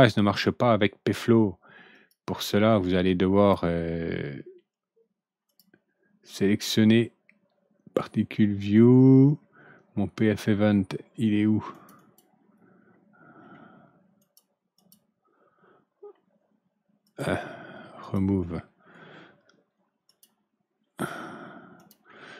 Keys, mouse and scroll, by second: 1.9 click, 3.3 click, 5.4 click, 11.7 click, 11.9 click, 14.1 click, 14.7 click, 17.0 click, 17.9 click, 20.0 click, 21.7 click.